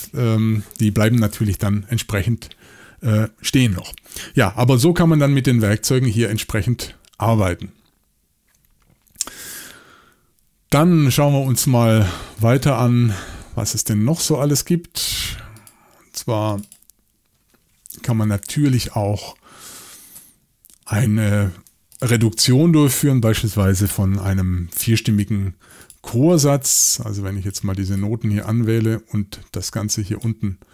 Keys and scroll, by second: 22.3 x.